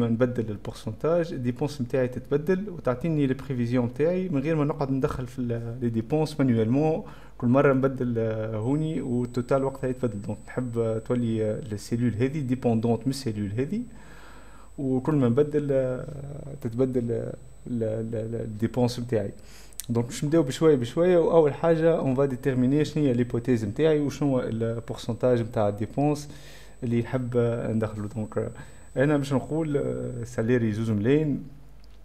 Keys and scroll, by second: 27.5 space.